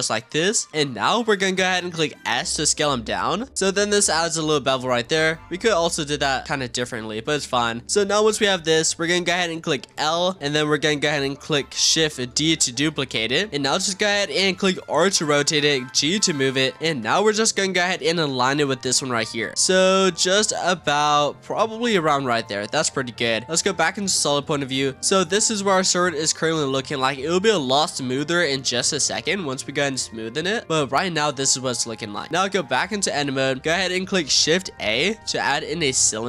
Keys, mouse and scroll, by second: 0.6-1.2 middle drag, 1.2-2.0 scroll up 1, 2.0 s, 3.7 Tab, 4.0-6.4 middle drag, 6.4 click, 6.9-7.5 scroll down 3, 7.5-8.8 scroll up 6, 7.8 Tab, 8.8 click, 9.8 l, 12.3 shift+d, 13.2 shift+middle click, 13.7 r, 15.4 g, 16.4-16.7 scroll up 2, 16.7-17.6 shift+middle drag, 17.1 z, 17.6-18.6 scroll up 2, 18.6 r, 19.7 g, 20.8 r, 21.7 g, 22.6 scroll down 2, 22.8 z, 23.6-24.0 scroll down 5, 24.0 click, 24.3 scroll down 1, 24.4-25.0 middle drag, 25.0 Tab, 25.4 click, 25.8-28.5 middle drag, 28.5-29.1 scroll down 5, 29.1-29.5 scroll up 3, 29.5-30.1 middle drag, 30.1-30.6 scroll down 1, 30.6-31.2 scroll up 1, 31.2 click, 32.3 scroll up 4, 32.5 Tab, 32.8 click, 33.0-33.4 scroll up 5, 33.4 shift+middle click, 34.0-34.6 scroll down 1, 34.6 shift+a.